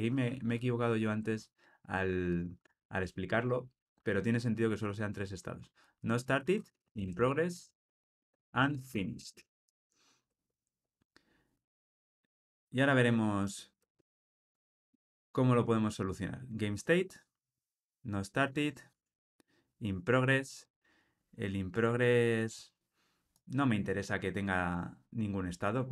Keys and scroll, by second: 15.0 Tab, 18.8 Tab.